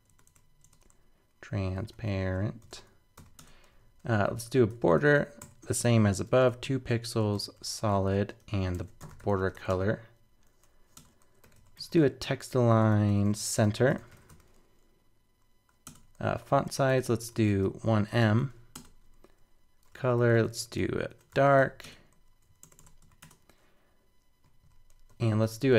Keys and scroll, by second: 22.6 super+BackSpace.